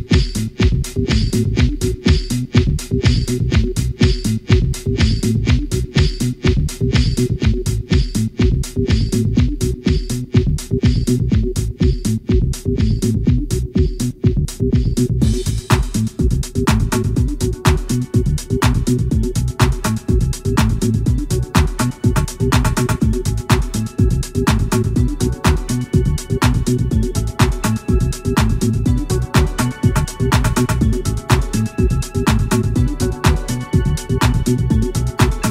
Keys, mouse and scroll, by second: 1.4 click, 4.4-5.9 drag, 7.4 shift+F6, 9.4 shift+right click, 11.5 v, 12.2 click, 14.0 right click, 14.4 r, 15.0 click, 15.9 right click, 16.6 s, 17.9 click, 19.0 right click, 20.4 right click, 20.8 r, 22.8 click, 23.8 right click, 24.3 s, 25.2 click, 26.2-27.5 right drag, 27.5-28.4 scroll up 3, 28.6 right click, 29.2 r, 31.1 click, 33.0 click, 33.8 click, 34.4 click, 34.8 x, 35.4 click.